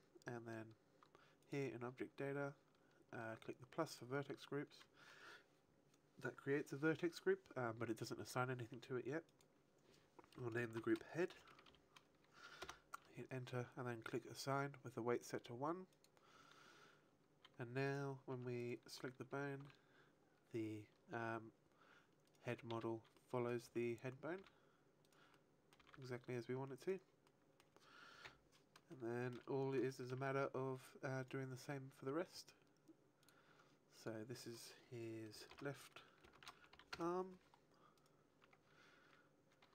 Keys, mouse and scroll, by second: 1.3 click, 2.3-3.3 scroll down 2, 3.7 click, 9.2 click, 15.7 click, 17.8 right click, 18.3 Tab, 18.5 right click, 19.4 r, 22.3 right click, 22.6 z, 23.0 middle click, 23.5 r, 25.0 right click, 25.3 middle click, 25.7 r, 26.7 right click, 27.2 middle click, 28.2 KP_1, 28.8 shift+middle click, 29.4-29.8 scroll down 3, 29.8 shift+middle click, 31.2 right click, 33.7 click, 34.9 click, 37.8 right click, 38.4 Tab, 39.0 a.